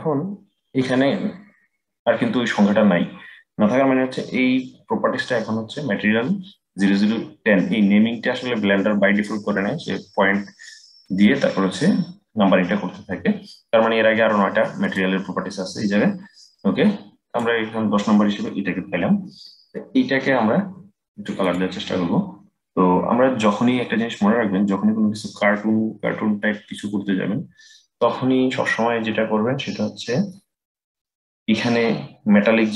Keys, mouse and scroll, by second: 14.5 click, 21.1 click, 29.2-30.1 scroll up 13, 30.1-32.7 middle drag.